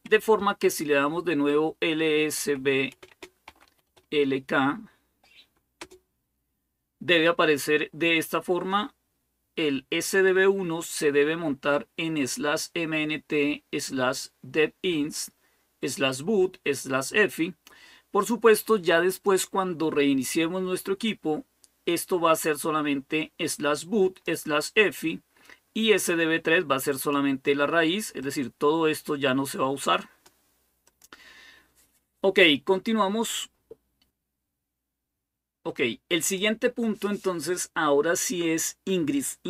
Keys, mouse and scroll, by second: 0.0-0.6 typing, 1.8-4.2 typing, 5.6 typing, 12.1-15.0 drag, 18.9 click, 20.9-24.4 drag, 26.7 click, 28.0-30.4 drag, 30.7 click, 36.0 click.